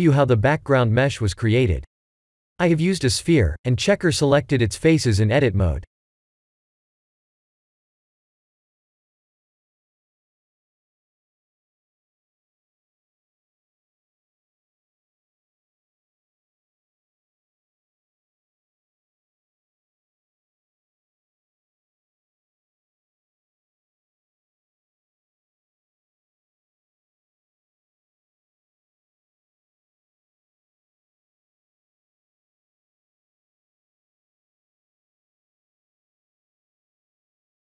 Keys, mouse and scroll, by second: 3.6 s, 6.4 click, 7.9-8.4 middle drag, 8.4 scroll down 1, 11.7 s, 13.2 click, 14.3 KP_0, 16.2 Tab, 16.8 3, 19.6-21.3 drag, 25.0-27.9 drag, 30.7-31.9 drag, 34.9 click, 35.7 Tab.